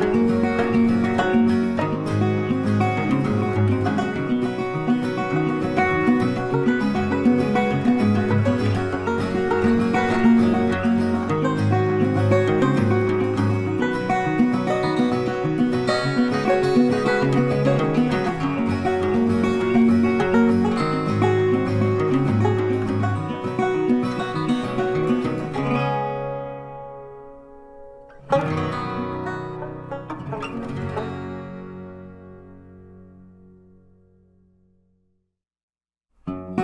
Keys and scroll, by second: 1.1 ctrl+t, 26.7 Return.